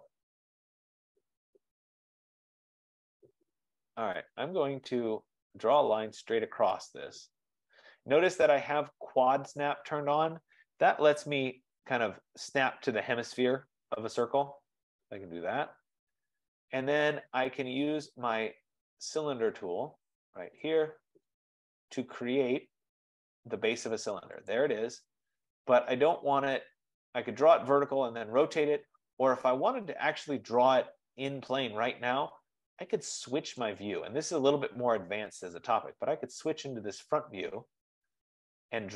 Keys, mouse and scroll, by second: 0.5-1.0 scroll, 4.0 click, 6.0 click, 7.7 click, 10.8 Return, 12.4-12.7 scroll down 3, 13.0 scroll up 1, 15.7 scroll, 19.3 click, 20.7 click, 24.5 click, 28.1-29.6 drag, 33.7 click, 35.3-37.0 scroll, 37.5-38.4 scroll.